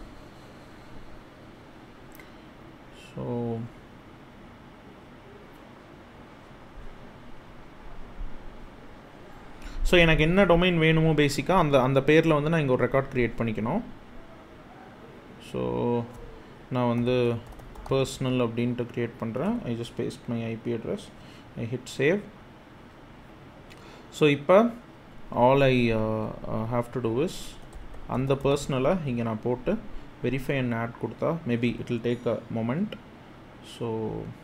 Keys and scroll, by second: 16.4-18.0 typing, 19.1 super+v, 27.1-28.7 typing.